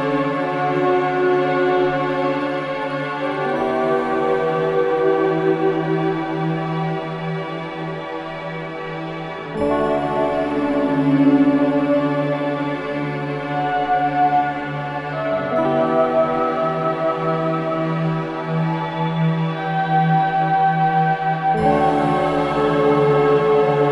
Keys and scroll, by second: 10.3 F9, 11.7 ], 15.1 4, 16.5 3.